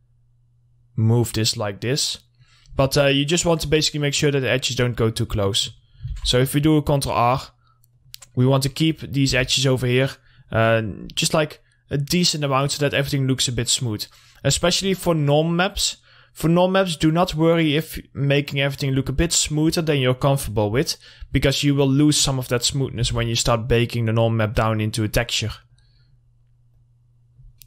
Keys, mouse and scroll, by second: 2.9 scroll down 1, 3.4 middle click, 3.9-4.4 scroll up 1, 4.4 middle click, 4.8 scroll down 1, 5.0 middle click, 5.9 scroll up 1, 6.3 ctrl+r, 6.6 click, 8.4 middle click, 9.5 2, 9.7 click, 10.2 scroll up 1, 10.3 scroll down 1, 10.5 middle click, 10.5 scroll up 1, 11.3 scroll down 1, 11.5 middle click, 11.8-12.2 scroll up 1, 12.5 middle click, 13.4-15.0 drag, 15.0 scroll down 1, 15.3 middle click, 16.0 scroll up 1, 17.5 click, 18.0 middle click, 18.3-19.1 scroll up 1, 19.1 click, 20.1 scroll down 1, 20.4 middle click, 20.8-21.4 scroll up 1, 21.4 middle click, 21.9-22.2 scroll down 1, 22.2 middle click, 22.6 scroll up 1, 23.2 ctrl+r, 23.5 click, 25.4-25.8 scroll up 1, 25.8 click, 26.2 middle click, 26.9 click.